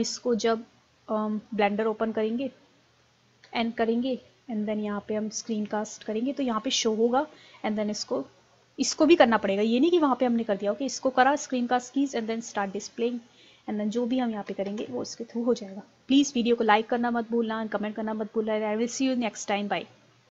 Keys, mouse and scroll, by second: 13.1 middle click, 14.6 Delete.